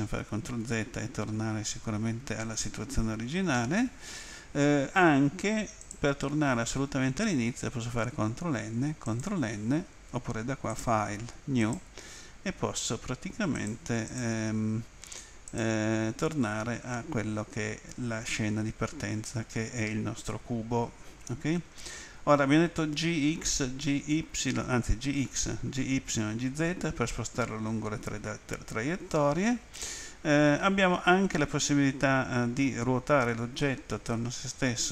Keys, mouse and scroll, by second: 5.8 click, 9.0 click, 10.8 click, 11.6 click, 13.5 click, 14.1 click, 15.5 click.